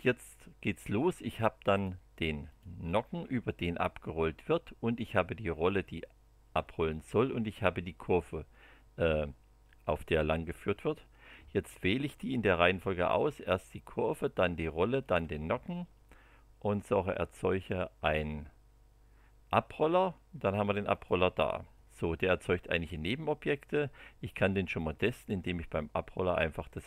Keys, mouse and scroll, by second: 1.7 click, 2.4 click, 3.0 space, 4.9 click, 5.5 space, 7.4 click, 12.6 click, 14.2 ctrl+click, 15.0 ctrl+click, 16.7 click, 20.9 click, 24.8 click, 26.6 click.